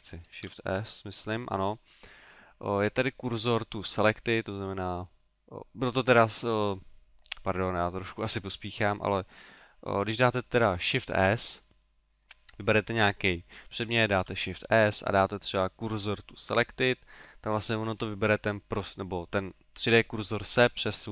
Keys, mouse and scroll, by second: 0.3 shift+s, 11.0 shift+s, 12.8 right click, 14.1 shift+s, 17.5 middle click.